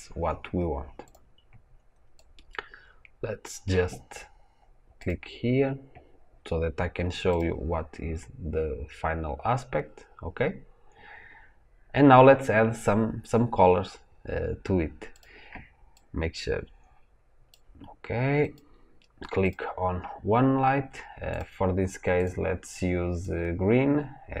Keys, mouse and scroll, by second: 1.1 click, 2.0-7.3 drag, 15.1 click, 15.8-18.5 drag.